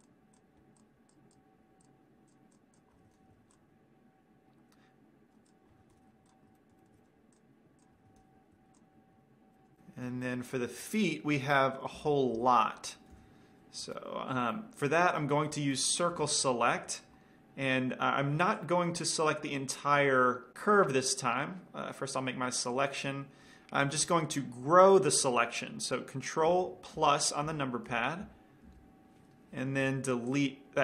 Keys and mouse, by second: 0.0-3.6 drag, 3.3 ctrl+l, 3.5 x, 5.0 middle click, 5.7 click, 6.2 ctrl+l, 6.4 x, 6.7 middle click, 7.6 click, 7.6 right click, 8.4 ctrl+l, 8.8 x, 9.9 middle click, 12.4 KP_1, 12.8 KP_5, 13.7 KP_3, 14.6-15.9 middle drag, 16.0 middle click, 17.2 c, 23.6 middle click, 23.8-25.2 middle drag, 30.3 x.